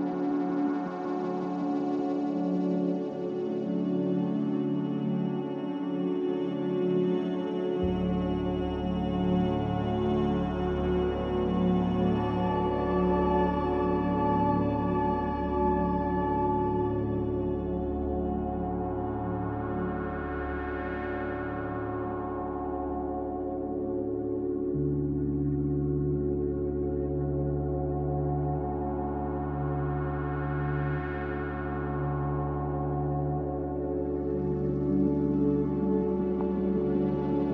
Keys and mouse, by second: 1.2 Tab, 2.8 click, 3.6 Tab, 4.2 Tab, 4.5 Tab, 4.9 Tab, 9.1 a, 13.1 z, 14.1 z, 15.2 z, 16.0-16.3 middle drag, 16.4 middle click, 18.6 3, 21.2 e, 31.5-33.3 middle drag, 35.7 middle click, 36.3-37.0 middle drag, 37.3 Tab.